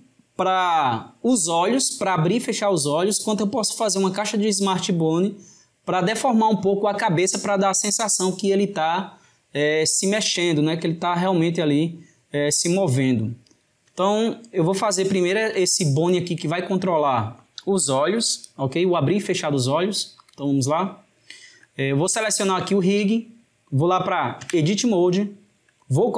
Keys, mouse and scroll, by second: 14.3-18.8 ctrl+middle drag, 20.2 click, 21.1-22.7 shift+middle drag, 22.7 click, 24.5 Tab, 25.2-26.1 shift+middle drag.